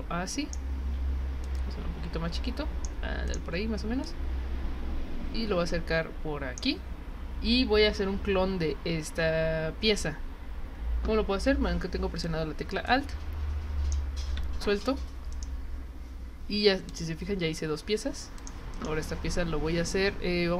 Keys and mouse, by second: 1.4-2.8 drag, 3.3 click, 4.0-6.6 drag, 12.2-13.9 drag, 15.3 right click, 16.9 click, 18.4 click.